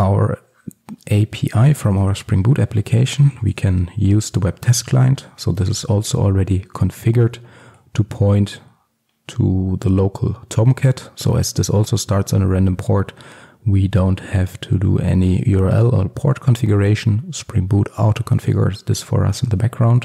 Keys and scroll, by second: 3.1 Return, 7.3 Escape.